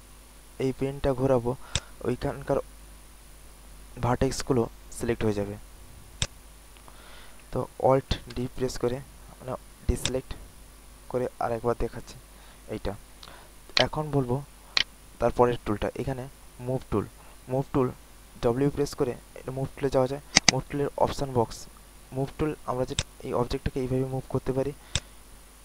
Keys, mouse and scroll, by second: 8.3 alt+d, 10.0-13.0 drag, 13.2 alt+middle click, 13.7 alt+right click, 14.2 alt+middle click, 14.7 alt+right click, 20.3 click, 21.8 alt+middle click, 22.9-25.6 drag.